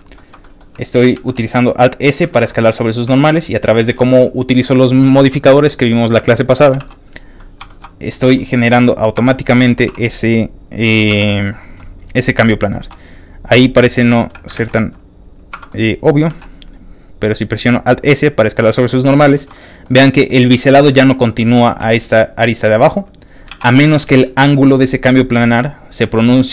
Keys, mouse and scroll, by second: 0.1 middle click, 0.4 middle click, 0.9 alt+click, 1.1 alt+s, 2.1 click, 2.3 shift+middle click, 2.5 middle click, 2.9 scroll up 1, 3.1 shift+middle click, 3.5 shift+click, 3.8 shift+g, 4.3 click, 5.3 middle click, 6.5 click, 6.6 g, 7.2 click, 7.4 middle click, 7.7 shift+middle click, 7.9 scroll up 2, 8.2 shift+middle click, 9.2 Tab, 9.3 middle click, 9.8 q, 10.8 click, 11.1 Tab, 11.2 middle click, 11.6 click, 11.8 middle click, 12.5 middle click, 12.8 g, 13.5 click, 14.0 Tab, 14.5 ctrl+a, 15.1 click, 15.5 Tab, 15.7 middle click, 16.3 alt+s, 18.6 alt+click, 18.8 alt+middle click, 19.3 shift+middle click, 19.5 middle click, 20.1 middle click, 21.4 shift+click, 21.5 g, 23.3 click, 23.5 ctrl+z, 23.6 ctrl+middle click, 24.4 g, 26.4 ctrl+click.